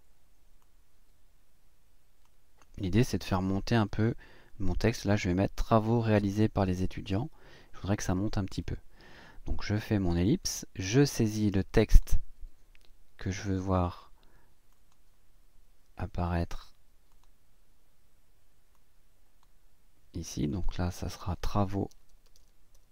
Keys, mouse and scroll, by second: 0.6-2.4 drag, 11.9 click, 14.7 click, 17.1 click, 18.7 click, 20.3 click, 21.9-22.9 typing.